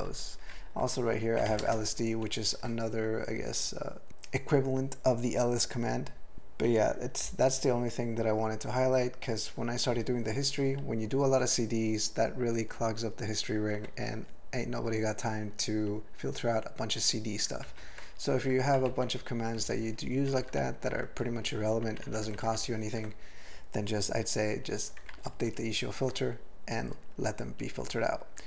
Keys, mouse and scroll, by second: 0.5 ctrl+n, 0.9 ctrl+n, 1.5 alt+m, 1.6 ctrl+space, 1.7 ctrl+e, 2.3 ctrl+g, 17.7 ctrl+n, 18.8 ctrl+alt+b, 18.9 ctrl+alt+f, 19.6 ctrl+p, 19.8 ctrl+p, 19.9 ctrl+p, 20.3 ctrl+n, 20.5 ctrl+n, 20.9 ctrl+n, 21.2 ctrl+p, 21.4 ctrl+p, 21.5 ctrl+p, 21.9 ctrl+n, 22.1 ctrl+n, 22.2 ctrl+n, 22.5 ctrl+n, 25.1 ctrl+alt+b, 25.3 ctrl+alt+f.